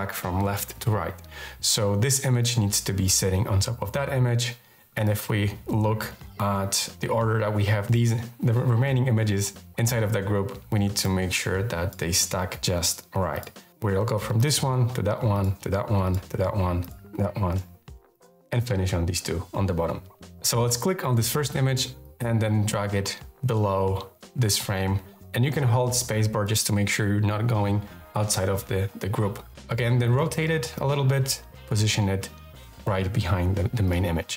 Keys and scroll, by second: 23.3 space.